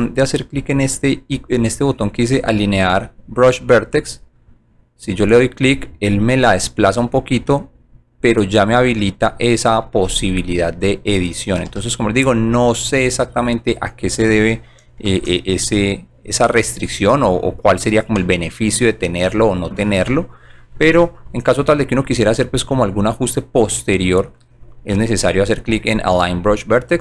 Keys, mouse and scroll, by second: 7.4 click, 8.7 click, 11.7 alt+j, 16.5 shift+click, 19.2 middle click, 19.3 middle click.